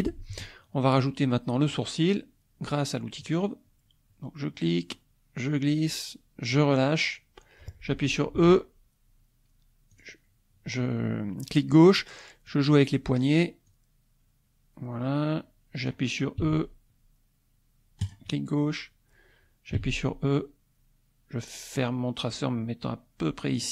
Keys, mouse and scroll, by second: 3.2 click, 4.9-6.7 drag, 8.4 e, 9.9 click, 12.5 click, 13.7-16.1 drag, 16.5 e, 18.0 click, 19.8 e, 23.6 click.